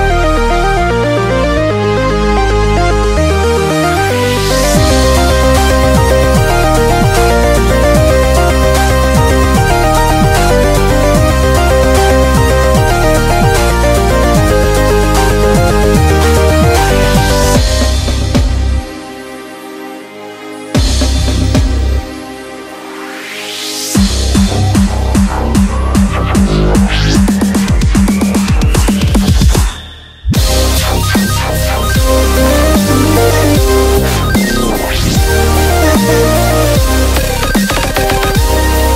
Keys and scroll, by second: 19.7 super+=, 20.3 super+=, 22.3 v, 22.7 b, 24.7-25.8 typing, 29.8 typing.